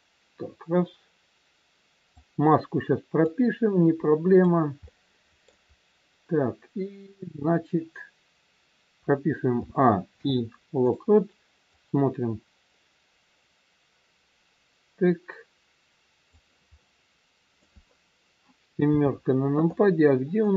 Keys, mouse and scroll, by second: 3.2 click, 4.9 middle click, 5.7-6.3 scroll down 2, 9.5 a, 10.0 i, 11.7 click, 16.6 middle click, 18.8 KP_7, 20.4 click.